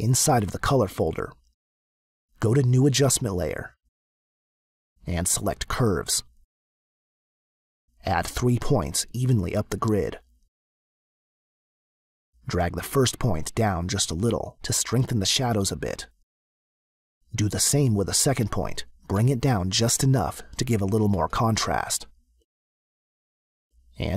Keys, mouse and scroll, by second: 0.8 click, 2.0 click, 4.0 click, 9.1 click, 10.3 click, 11.8 click, 13.7 click, 19.1 click.